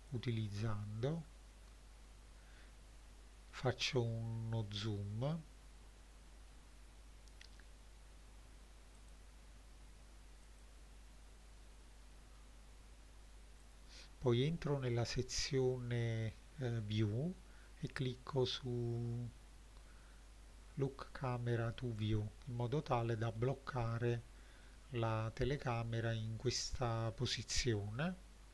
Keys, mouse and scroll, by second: 0.0 click, 0.6-1.9 scroll up 4, 9.0 click, 10.5 click, 13.6 click, 20.9 click, 21.9-22.4 scroll down 2, 22.9 scroll down 1, 23.4 middle click, 28.0 n.